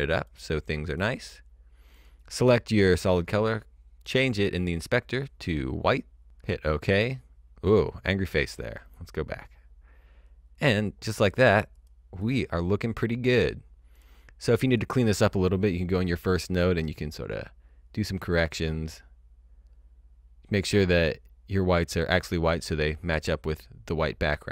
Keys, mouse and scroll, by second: 4.0 click, 6.4 click, 8.0 click, 11.7 click, 13.9 click, 17.5-19.4 scroll down 1, 19.6-20.6 scroll up 1, 20.6 scroll, 20.8-21.2 scroll down 1, 21.2-22.5 scroll up 1.